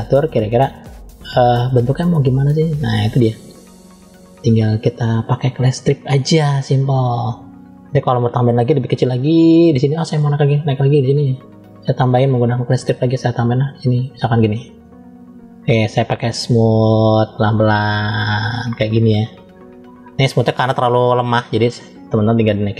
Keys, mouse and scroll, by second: 4.1 middle click, 8.8 f, 10.1 click, 12.1 click, 12.9 click, 16.2 click, 16.9 click, 21.0-22.4 drag.